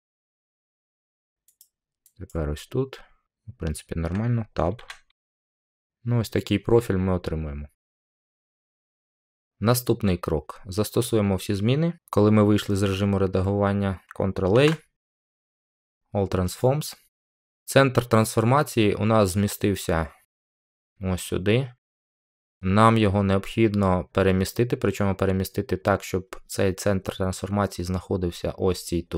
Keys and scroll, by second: 4.7 Tab, 14.5 ctrl+a.